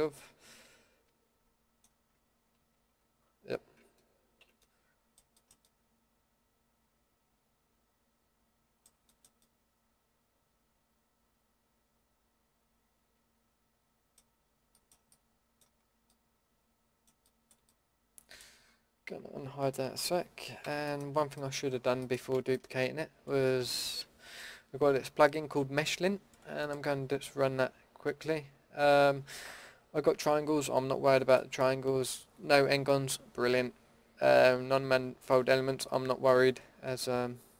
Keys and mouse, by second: 2.6 ctrl+z, 4.4 ctrl+x, 14.2-16.3 drag, 16.3 middle click, 16.7 middle click, 17.2 middle drag, 18.0 middle click, 19.5 middle click, 19.9 alt+h, 20.6 a, 28.4-32.1 middle drag.